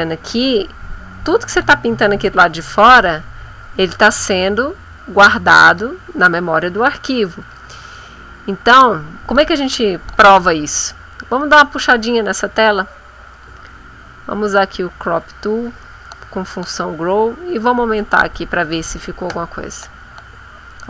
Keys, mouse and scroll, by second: 2.9-5.9 drag, 13.3 click, 15.0 click, 16.6-18.5 drag, 19.2 Return.